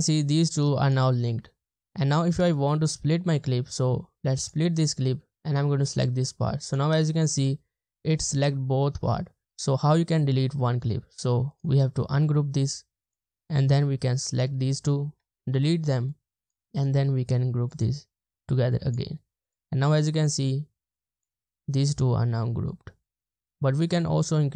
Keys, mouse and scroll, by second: 11.5 right click, 13.1 double click, 15.4 BackSpace, 16.8 right click, 20.0 double click.